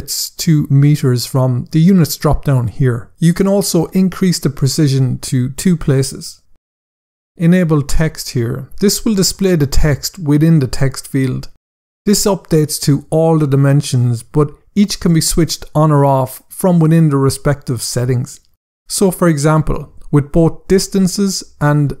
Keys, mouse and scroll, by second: 4.8 click, 8.3 click.